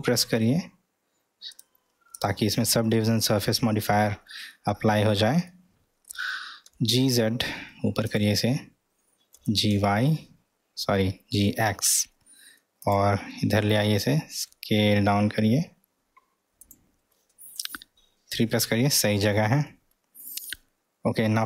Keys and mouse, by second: 4.8 ctrl+middle click, 5.5-6.1 middle drag, 6.7 g, 9.3 g, 14.3 s.